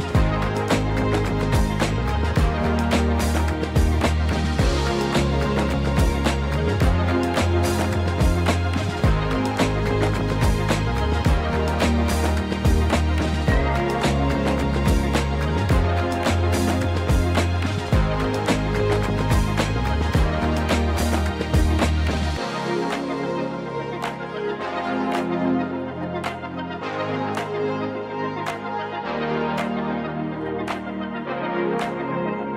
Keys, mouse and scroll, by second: 4.3-7.5 drag, 10.8 KP_7, 11.2 scroll down 1, 12.0-12.6 scroll down 2, 13.8 shift+d, 17.5 click, 18.5 KP_0, 26.8 click, 28.9 click, 28.9-29.7 scroll down 3, 29.7-32.5 drag.